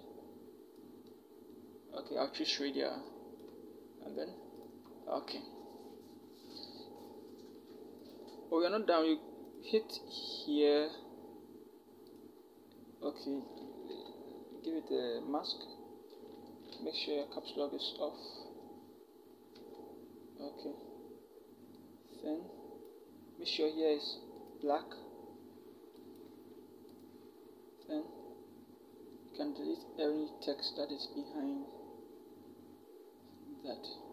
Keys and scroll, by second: 13.7 b, 17.1 Tab, 19.3 Caps_Lock.